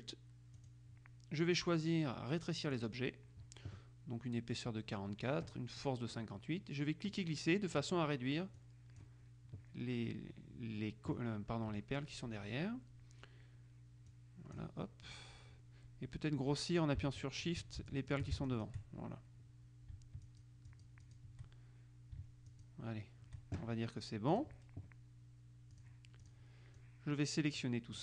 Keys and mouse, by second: 0.8 click, 2.9 click, 6.0 middle click, 7.3-8.4 drag, 8.8 click, 14.2-15.2 drag, 17.4 shift+click, 18.6 shift+click, 20.4-21.8 shift+drag, 22.6 shift+click, 24.4 click, 25.9-26.9 drag.